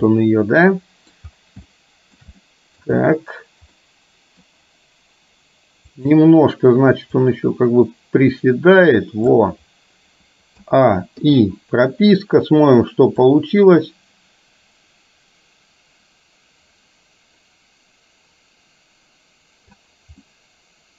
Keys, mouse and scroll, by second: 0.2-1.3 middle drag, 1.7-2.3 shift+middle drag, 2.5-2.9 middle drag, 3.9 middle click, 5.9 click, 7.3 click, 7.7-9.4 drag, 10.7 a, 11.3 i, 13.3-19.9 drag, 20.3-20.9 middle drag.